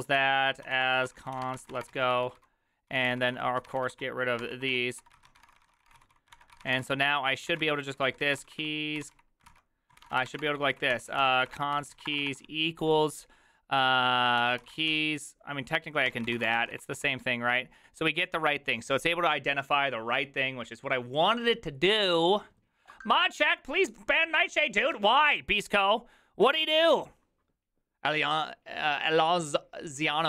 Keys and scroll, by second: 0.0-12.7 typing, 14.2-17.6 typing.